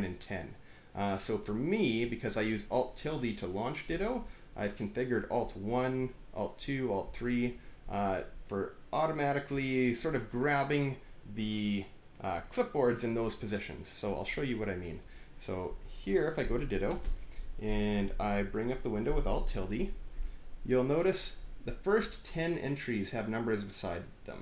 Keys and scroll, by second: 16.8 Return, 16.9 Return.